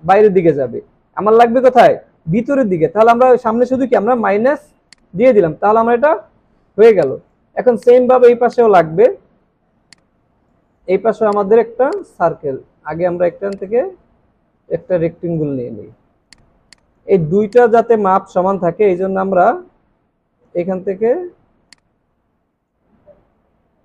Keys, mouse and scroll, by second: 6.5 alt+scroll down 3, 6.9 space, 7.5 space, 16.7 double click, 16.7 space, 20.8 alt+scroll up 1.